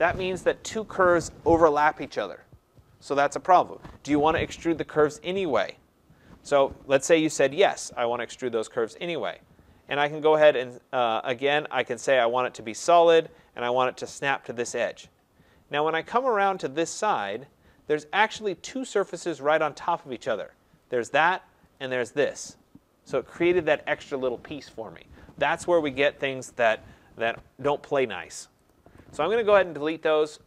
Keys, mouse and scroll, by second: 7.8 click, 12.0 click, 14.5 click, 15.3-15.7 scroll, 16.5 right click, 17.0 scroll, 17.1 middle click, 17.1 middle click, 17.5 middle click, 17.6 middle click, 18.2 middle click, 19.0 click, 20.9 click, 21.7 click, 28.0 Delete, 28.7 click, 28.8 Delete, 30.2 click.